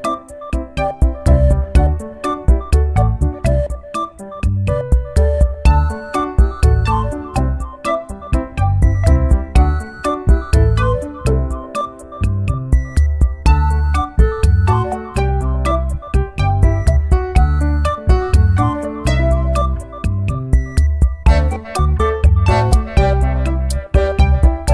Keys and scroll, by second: 1.6 ctrl+t, 19.1 ctrl+j.